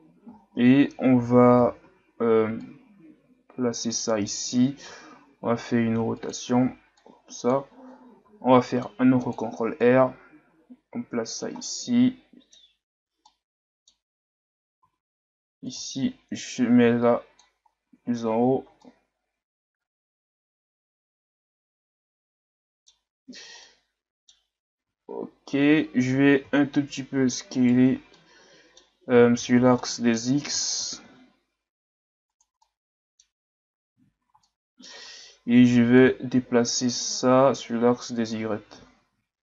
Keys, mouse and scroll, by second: 0.5-1.1 shift+scroll up 3, 1.1 Tab, 1.6 a, 1.8 a, 2.6 click, 4.9 r, 7.0 click, 8.2 ctrl+r, 9.8 click, 11.7-14.2 middle drag, 14.2 scroll down 1, 14.5 a, 14.8 a, 15.7 click, 17.7 scroll down 3, 17.9 Tab, 18.4 a, 18.9-21.9 middle drag, 23.0-23.6 scroll up 1, 23.6-24.4 middle drag, 24.4-24.9 scroll up 2, 24.9 Tab, 26.1 s, 28.2 middle click, 28.9-29.5 scroll down 3, 29.5 scroll up 2, 29.8 middle click, 30.6 s, 32.6 middle click, 33.6 Tab, 34.4 middle click, 34.9 Tab, 35.9 click, 38.7 Tab.